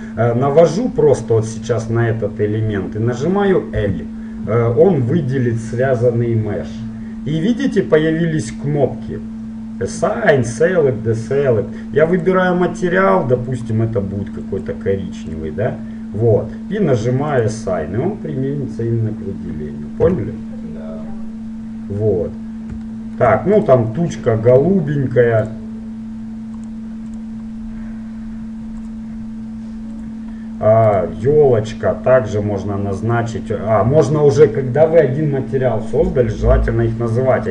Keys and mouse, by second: 3.9 l, 12.3-15.6 drag, 17.4-19.4 drag, 20.2 Tab, 23.8-25.6 right drag, 25.6-30.9 drag, 31.0-32.8 right drag.